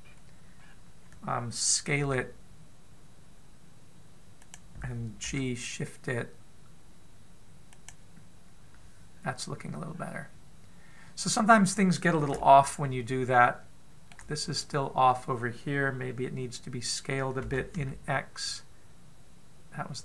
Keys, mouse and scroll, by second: 0.8-1.4 scroll down 2, 1.4-2.8 scroll down 1, 2.8 scroll up 1, 2.9 s, 6.1 g, 10.7-12.3 scroll up 1, 12.3-13.2 scroll down 1, 13.2 shift+middle click, 13.2-13.9 scroll down 1, 14.9-15.6 shift+scroll up 1, 18.3 s.